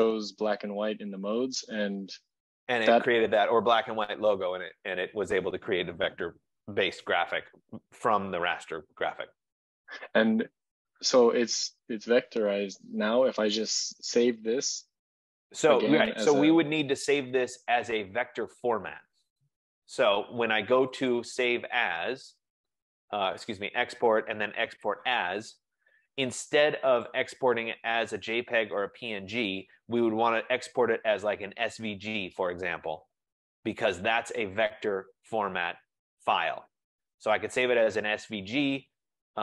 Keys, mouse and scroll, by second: 17.3 click, 21.2 click, 25.0 click, 27.2 click, 37.7 click.